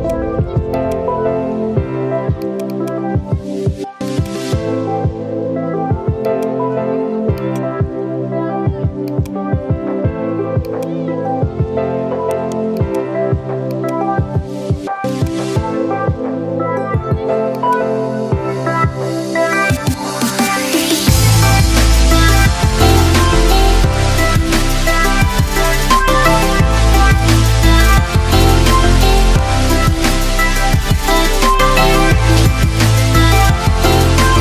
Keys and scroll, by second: 5.6 Delete, 8.3 Delete, 33.6 ctrl+z.